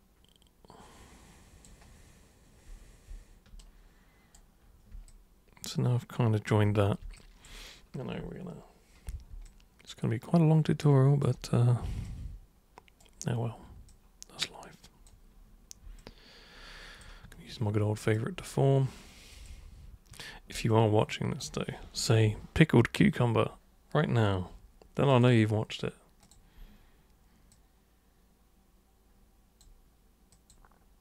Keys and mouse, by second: 3.6 super+right click, 5.1-6.5 alt+super+drag, 7.1 alt+super+click, 9.4-11.2 alt+super+drag, 12.0 super+right click, 13.9-15.1 super+drag, 16.0-17.0 alt+super+drag, 18.0 super+click, 19.3 super+click, 20.7 alt+super+click, 25.1 super+click, 26.3 super+click, 27.5-29.6 super+drag, 30.3 super+click.